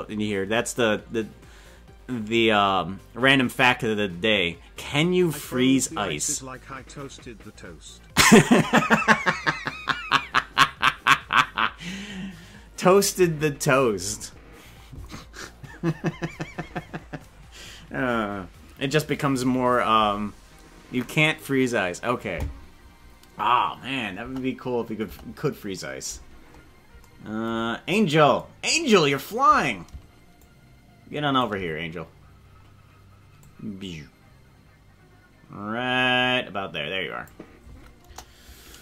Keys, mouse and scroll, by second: 25.0 KP_0, 26.4-26.9 scroll down 10, 29.1-30.4 right drag, 30.4-31.5 shift+drag, 32.4 scroll down 1, 33.4-35.9 drag, 38.0 KP_0.